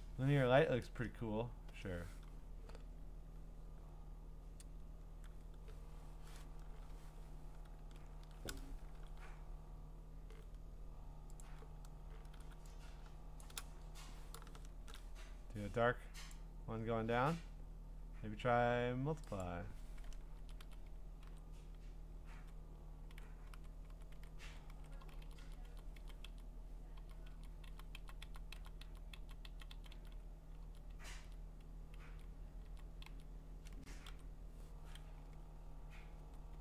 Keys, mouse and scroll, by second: 1.7 Up, 1.7 Return, 9.0 g, 11.4 click, 12.3 g, 13.4 shift+click, 14.7 ctrl+shift+f, 16.4 click, 20.4-22.4 scroll down 2, 22.5 Down, 23.1 Up, 24.1 Up, 25.4 Down, 25.7 Down, 26.0 Down, 26.3 Down, 27.0 Down, 27.3 Down, 27.7 Down, 28.0 Down, 28.2 Down, 28.5 Down, 29.2 Down, 29.5 Down, 29.7 Down, 29.9 Down, 30.6 Down, 31.2 Down, 32.1 Down, 32.6 Down, 33.1 Down, 35.2 Up.